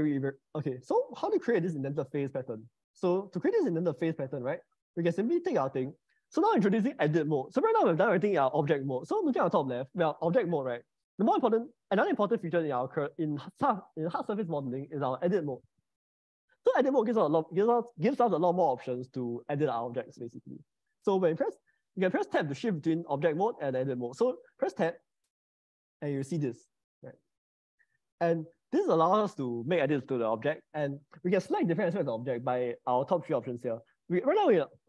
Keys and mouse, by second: 2.7 shift+middle click, 3.4 middle click, 4.9 shift+middle click, 5.4 click, 10.1-15.8 drag, 16.1 click, 20.6 click, 24.6 Tab, 25.8 middle click, 27.2 shift+middle click, 28.0 middle click.